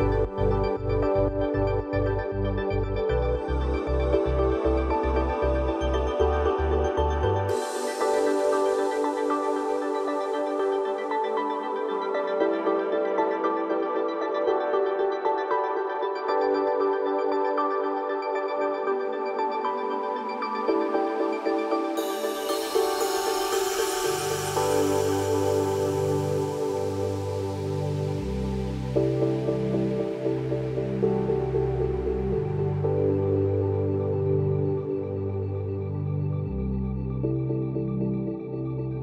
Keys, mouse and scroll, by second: 1.0 click, 2.0-3.4 shift+drag, 6.0 alt+scroll down 1, 7.0 click, 7.3 alt+scroll up 1, 7.6 click, 10.6-11.1 drag, 14.9 alt+scroll down 1, 16.3 F7, 17.1 alt+scroll up 1, 17.6 alt+scroll down 1, 17.9 alt+scroll up 1, 18.8 click, 23.1-25.1 drag, 25.4 ctrl+d, 25.8-28.8 drag, 29.5 alt+scroll down 1, 29.8 alt+scroll up 1, 31.2 click, 35.5-37.6 drag, 38.2-38.8 alt+scroll down 1.